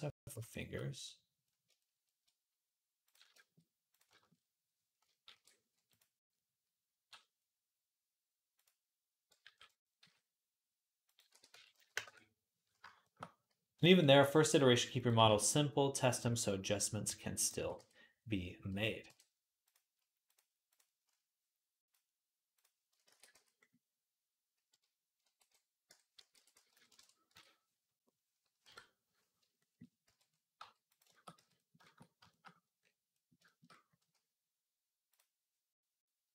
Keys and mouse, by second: 2.0-3.4 shift+drag, 3.4-22.9 middle drag, 5.1 shift+a, 9.3 alt+g, 9.8 s, 11.1 r, 13.7 s, 16.9 s, 17.4 s, 20.2-28.0 drag, 22.9 ctrl+a, 25.1 alt+r, 25.7 Tab, 26.0 a, 26.2 r, 27.2 Tab, 28.5 KP_7, 29.9 z, 30.3 click, 30.4 g, 30.8-36.3 shift+middle drag, 31.2 z.